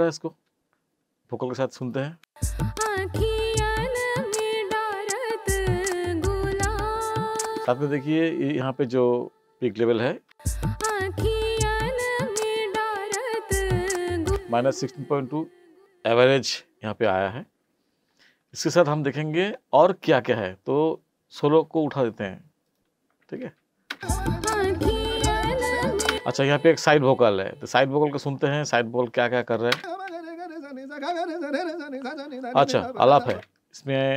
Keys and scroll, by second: 2.2 space, 7.6 space, 10.3 space, 14.3 space, 23.9 space, 26.1 space, 29.7 space, 33.3 space.